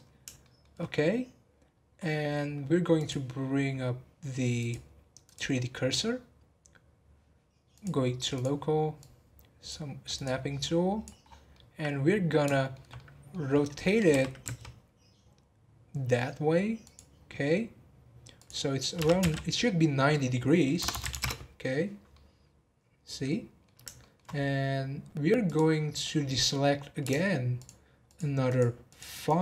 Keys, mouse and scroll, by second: 0.4-2.9 shift+middle drag, 2.9 click, 3.8-4.5 scroll up 1, 4.5-7.6 drag, 7.7-10.2 drag, 10.6 click, 11.2 scroll down 2, 11.5-13.8 middle drag, 13.8 scroll up 2, 14.1 r, 18.3-20.9 drag, 20.9 BackSpace, 22.1-24.3 middle drag, 24.3-25.4 scroll up 2, 25.4 click, 25.8 scroll down 1, 26.0 middle click, 26.6-27.6 scroll up 1, 27.6 alt+shift+click, 28.1 alt+shift+click, 28.4 alt+shift+click, 28.8 alt+shift+click, 29.2 alt+shift+click.